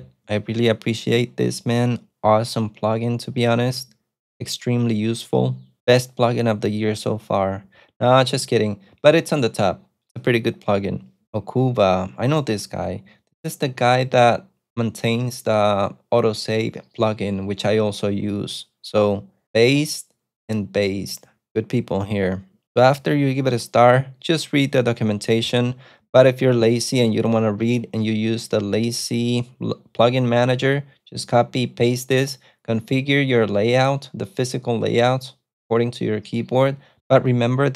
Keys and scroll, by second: 26.9 super+Tab.